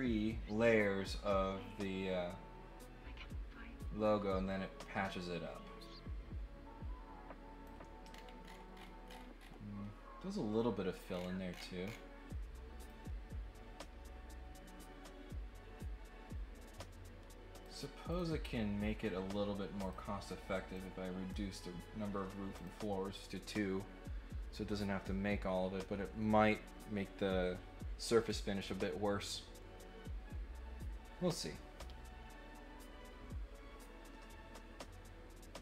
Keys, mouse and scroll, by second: 8.1 scroll down 1, 8.4-9.4 scroll up 4, 11.1-11.9 scroll down 3, 12.9-17.6 drag, 18.1 click, 19.7 click, 20.7 click, 22.5 click.